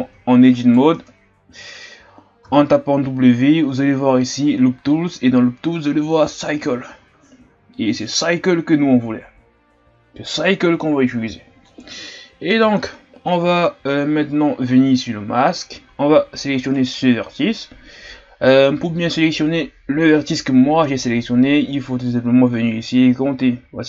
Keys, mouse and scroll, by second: 0.2 scroll down 3, 0.5 right click, 1.0 Tab, 1.6-2.0 scroll up 2, 11.4-12.0 shift+scroll up 3, 12.0-12.8 ctrl+scroll up 1, 12.8-14.2 scroll up 2, 14.2-15.1 shift+scroll up 2, 16.7 right click.